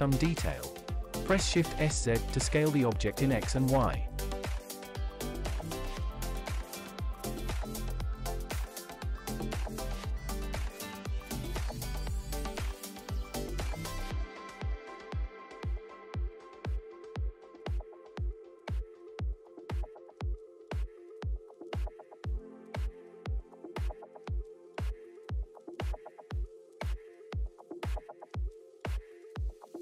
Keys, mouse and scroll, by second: 0.8 shift+z, 6.7 click, 8.2 click, 10.2 drag, 12.3-12.7 scroll up 3, 12.7 shift+middle click, 13.1-13.4 scroll up 2, 13.4 shift+middle drag, 13.8-14.2 scroll up 1, 14.7 scroll down 1, 15.3 KP_1, 15.7-16.4 scroll down 4, 17.5 click, 18.0 shift+middle drag, 18.4-19.1 middle drag, 19.7 Tab, 20.9 click, 21.9 click, 22.4 middle click, 24.0 click, 25.7 click, 28.3 middle click, 28.8 shift+middle click, 29.5 middle click.